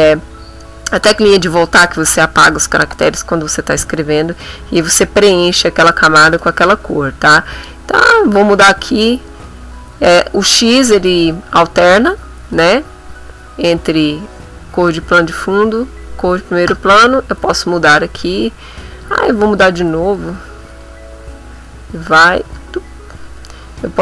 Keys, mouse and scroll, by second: 7.2 click, 7.6 click, 10.9 x, 14.7 x, 15.5 x, 16.7 BackSpace, 18.9 click, 19.2 click, 20.3 x, 22.4 BackSpace.